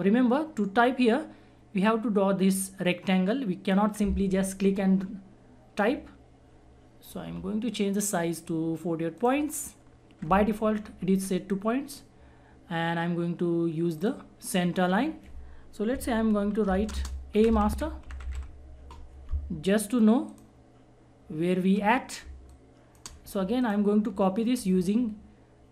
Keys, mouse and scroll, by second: 1.8-8.0 drag, 14.0 click, 16.7-18.8 typing, 20.3 click, 22.2 space, 22.5 click, 22.7 space, 23.6 shift+click.